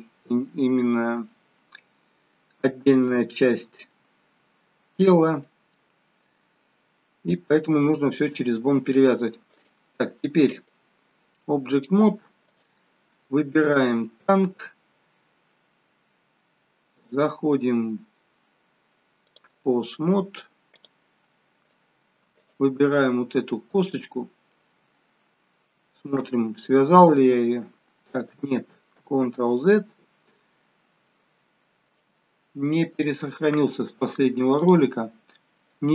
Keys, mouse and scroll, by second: 0.5 shift+middle click, 1.3 shift+middle click, 2.9 shift+middle click, 4.2-5.3 scroll down 1, 5.3 scroll down 3, 5.4 middle click, 6.7-7.8 scroll down 1, 8.4 shift+middle click, 9.7 click, 13.5 click, 15.1 shift+click, 19.9 middle click, 20.7 click, 21.6 shift+click, 22.4 click, 23.3 middle click, 25.3 middle click, 27.3 g, 31.9 click.